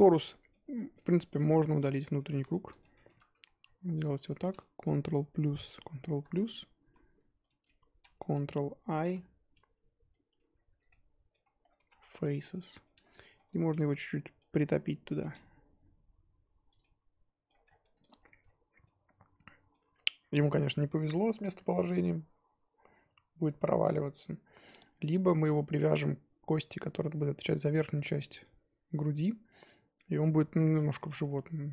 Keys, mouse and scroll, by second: 0.6 Tab, 0.7 middle drag, 1.0 scroll up 1, 1.2 z, 1.5-2.3 middle drag, 2.3 z, 2.5-3.0 shift+middle drag, 3.0 3, 4.0 alt+click, 4.2-5.5 shift+middle drag, 5.5 ctrl+KP_Add, 6.1 ctrl+KP_Add, 6.9 z, 7.4-7.9 middle drag, 7.9 z, 9.0 ctrl+i, 10.1 middle click, 10.5-10.9 scroll down 7, 10.9-11.4 middle drag, 11.4-11.7 scroll up 8, 11.7 x, 12.5-12.9 middle drag, 12.9 a, 13.2 shift+middle drag, 13.4-13.9 scroll up 3, 13.9-15.2 middle drag, 15.2 g, 16.9 middle click, 17.6-18.8 scroll down 10, 17.8 Tab, 18.0 click, 18.8-24.7 middle drag, 24.7-25.8 scroll up 4, 28.0 scroll down 1, 28.1-30.8 middle drag, 30.8-31.2 scroll down 4, 31.2-31.7 middle drag.